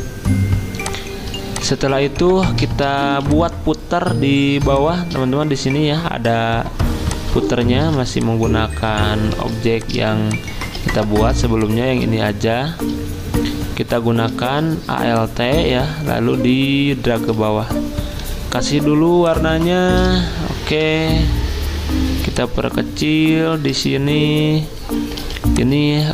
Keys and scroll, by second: 3.1 z, 7.8 v, 9.3 ctrl+alt+2, 10.8 ctrl+z, 18.2 i, 20.7 v, 25.2 z.